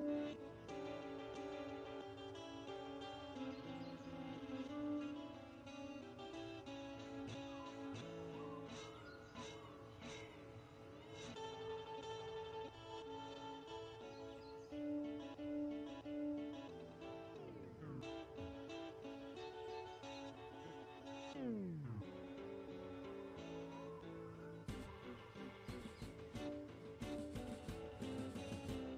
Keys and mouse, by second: 0.0 KP_Decimal, 2.3 z, 4.5 Tab, 5.0 click, 5.2 x, 6.2 Tab, 6.6 shift+d, 6.9-7.6 drag, 6.9 s, 8.0-8.8 right drag, 8.2 Tab, 8.6 a, 8.8 s, 9.5-10.2 drag, 9.6 s, 10.5 click, 10.7 s, 12.0 s, 12.8 Tab, 14.8 click, 16.6-19.3 drag, 18.8 Tab, 20.0 r, 21.4 r, 22.1 r, 22.8 s, 23.5-24.6 drag, 24.6 s, 24.9 click, 25.8 Tab, 26.7-28.3 drag, 28.3 m.